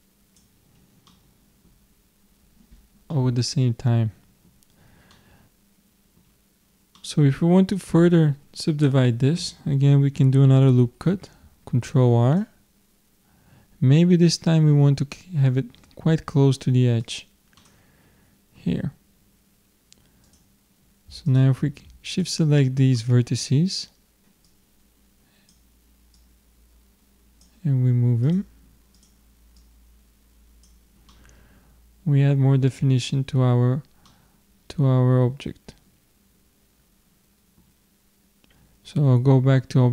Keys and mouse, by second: 0.7 middle click, 5.8-11.1 middle drag, 11.1 ctrl+r, 17.6-22.2 middle drag, 20.3-23.8 drag, 22.6-24.0 middle drag, 24.5-28.0 drag, 24.5 middle click, 28.3-31.3 drag, 31.1-33.0 middle drag, 33.5-36.0 middle drag.